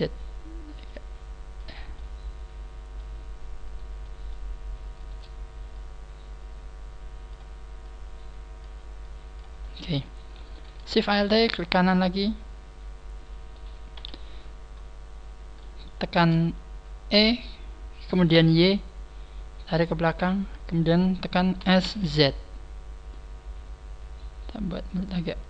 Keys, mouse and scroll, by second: 1.9 click, 1.9 middle click, 3.6 middle click, 3.6 right click, 4.0 middle click, 4.5-4.9 scroll up 2, 4.9 shift+right click, 5.7 click, 7.8 click, 8.9 click, 9.3 click, 9.6 middle click, 10.1 middle click, 10.1 a, 11.0 alt+shift+right click, 11.6-12.0 scroll down 6, 12.0 middle click, 13.9 KP_3, 14.4 scroll down 2, 15.1 scroll up 1, 15.2 scroll down 1, 15.8 shift+middle click, 17.1 e, 20.2 click, 21.5 s.